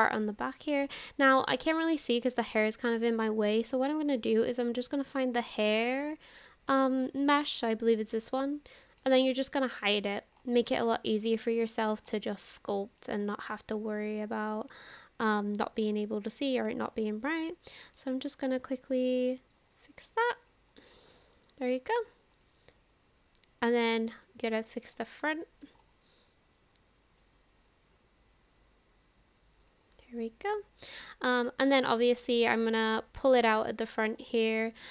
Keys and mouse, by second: 0.5 middle click, 1.5 shift+middle click, 1.9 middle click, 7.2 click, 9.0 click, 10.7 shift+middle click, 11.3 middle click, 12.2 middle click, 12.5 click, 12.5 right click, 12.6 middle click, 12.6 click, 12.6 right click, 12.9 middle click, 12.9 click, 12.9 right click, 13.4 middle click, 14.7-16.6 drag, 16.9 middle click, 17.7 shift+middle click, 18.3 middle click, 18.9 click, 19.1 middle click, 19.9 middle click, 20.9 shift+click, 21.4 click, 22.4-23.7 middle drag, 24.3 shift+middle click, 24.7 middle click, 25.4 shift+middle click, 27.2-29.6 drag, 30.1 middle click, 31.1 shift+middle click, 31.5 middle click, 32.4 shift+middle click, 33.0-34.0 middle drag.